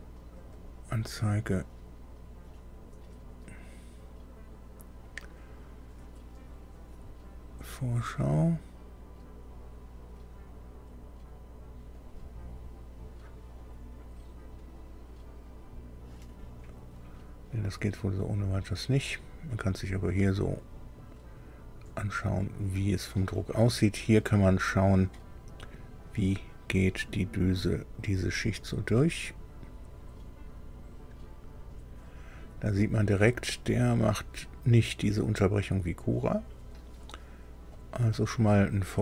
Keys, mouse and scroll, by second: 0.5 click, 6.9 click, 8.3 click, 11.9 click, 13.5 click, 15.4 click, 18.9-23.3 drag, 24.8-37.8 drag.